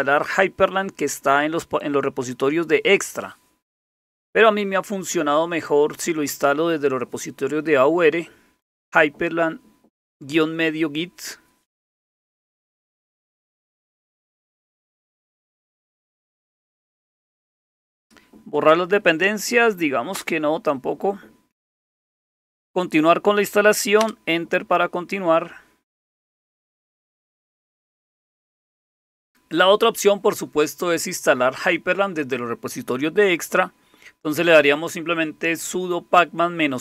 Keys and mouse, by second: 20.1 Return, 24.1 Return.